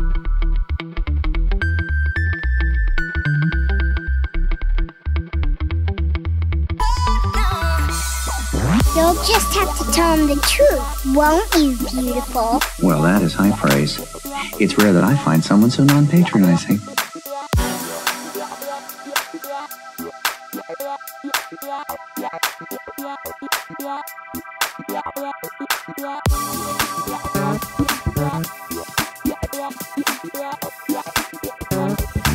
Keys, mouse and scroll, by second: 0.2 l, 1.2 KP_1, 2.2 KP_5, 3.9 r, 4.7 Escape, 5.2 click, 5.8 r, 6.9 r, 14.4 click, 14.8-16.6 middle drag, 17.6 click, 18.3 g, 18.8 x, 20.3 click, 21.9 g, 22.0 y, 24.9 click, 24.9 x, 25.4-26.8 middle drag, 27.0 Tab, 27.9-32.3 drag.